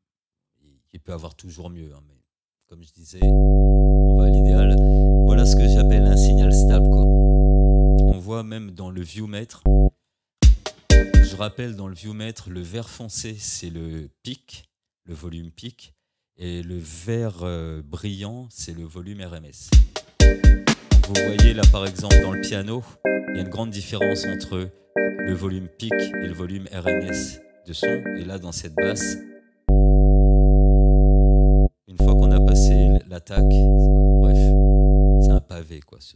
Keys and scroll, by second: 10.4 space, 19.7 space.